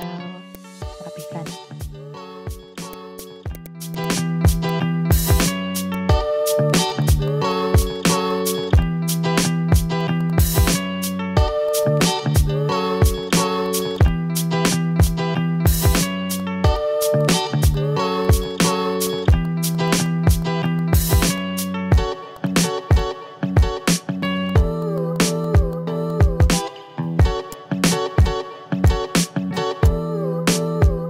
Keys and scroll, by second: 0.8 v, 3.7 a, 6.2 Delete, 6.3 ctrl+z, 7.0 ctrl+z, 7.5 ctrl+z, 7.9 ctrl+z, 8.2 v, 9.2 ctrl+v, 9.8 ctrl+v, 10.1 ctrl+z, 15.8 a, 16.4 a, 17.7 v, 19.4 v, 20.3 v, 21.3 v, 24.7 i, 24.9 v, 26.7 ctrl+z, 27.2 v.